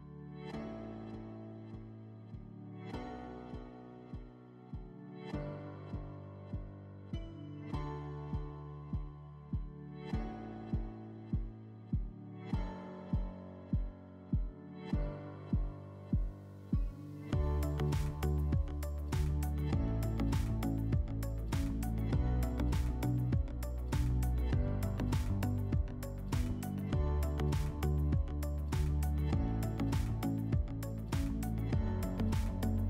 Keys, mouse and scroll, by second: 0.0 F4, 1.1 alt+w, 3.0 middle click, 4.1 click, 5.1 click, 7.4 click, 8.8 right click, 9.3 right click, 10.5 w, 13.7 click, 15.4 click, 16.3 alt+w, 17.6 alt+middle click, 18.2 click, 18.8 click, 22.2 click, 23.6 click, 25.6-27.2 drag, 27.4-28.0 drag, 29.8 click, 30.0 click, 30.7-31.5 typing.